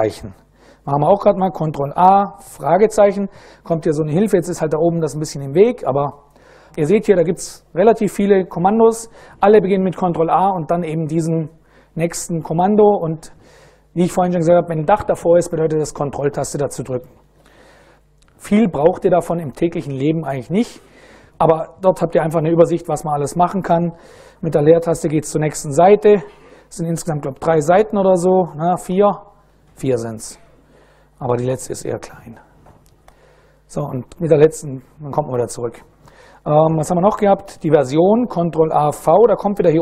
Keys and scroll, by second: 0.9 ctrl+a, 1.6 shift+/, 24.4 space, 27.1 space, 28.6 space, 32.6 space, 36.2 super+BackSpace, 38.9 ctrl+a.